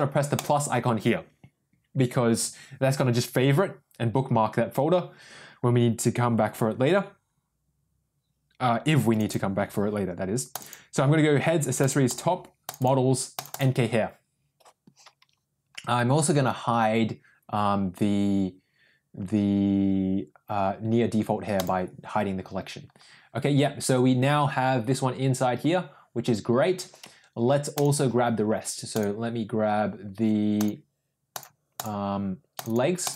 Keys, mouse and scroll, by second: 21.6 click, 27.7 click.